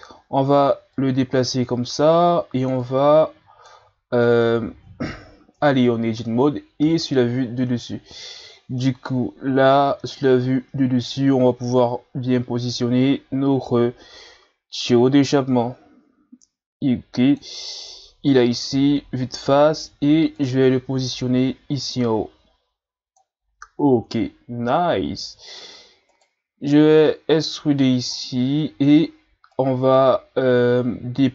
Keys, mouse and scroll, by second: 0.9-5.6 drag, 5.6 Tab, 6.9 KP_7, 8.8-10.0 shift+scroll up 1, 10.2-13.2 drag, 18.7 KP_1, 20.4 click, 23.4-24.7 scroll up 6, 24.9-26.0 scroll up 3, 26.1 right click, 26.9-28.2 drag, 28.2-28.7 ctrl+scroll down 4, 29.5 right click.